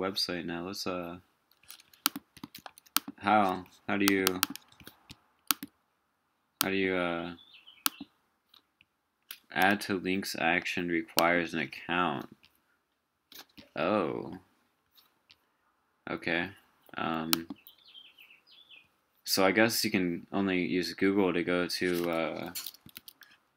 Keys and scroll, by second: 2.4 super+a.